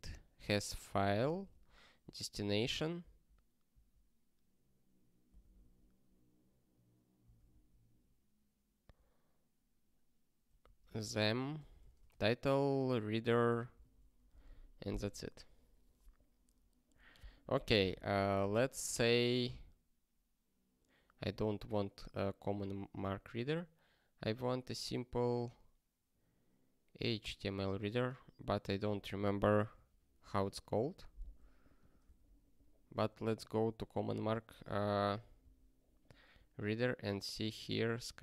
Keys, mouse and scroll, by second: 0.8 ctrl+b, 1.3 alt+f, 1.5 alt+f, 3.0 ctrl+n, 3.7 ctrl+n, 5.3 ctrl+p, 5.5 ctrl+p, 7.2 ctrl+n, 7.4 ctrl+n, 10.6 ctrl+a, 10.8 ctrl+space, 11.0 ctrl+n, 11.5 ctrl+g, 11.8 ctrl+n, 11.9 ctrl+space, 13.2 ctrl+g, 15.2 scroll down 1, 17.8 click, 21.6 scroll down 1, 22.2 scroll up 1, 31.7 click, 32.2 alt+., 33.3-33.8 scroll down 1, 35.4 ctrl+j, 37.4 ctrl+n, 38.1 ctrl+n.